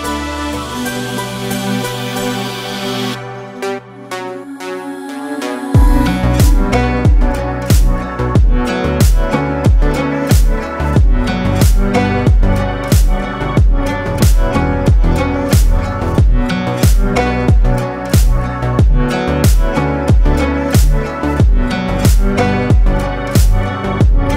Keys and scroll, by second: 0.5 ctrl+space, 4.4 ctrl+space, 5.2 ctrl+space, 9.3 ctrl+alt+2, 10.8 ctrl+2.